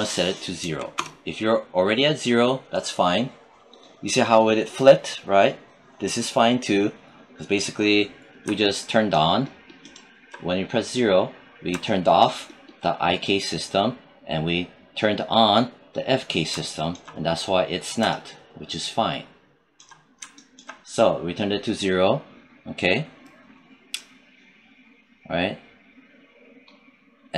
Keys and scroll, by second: 0.4 0, 0.7 Return.